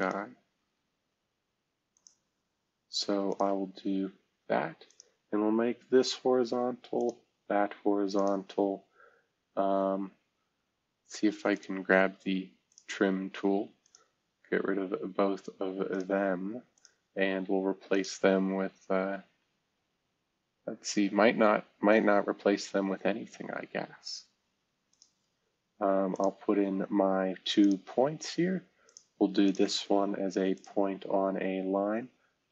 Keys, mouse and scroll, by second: 0.5-1.3 scroll up 2, 3.9 Escape, 4.8 click, 6.0 h, 6.9 click, 7.2 click, 7.2 h, 8.7-9.6 scroll up 1, 11.5 click, 14.5 Escape, 22.5 Escape, 27.8 Escape, 28.8 middle click, 29.4 ctrl+middle click, 30.5 click, 31.9 s.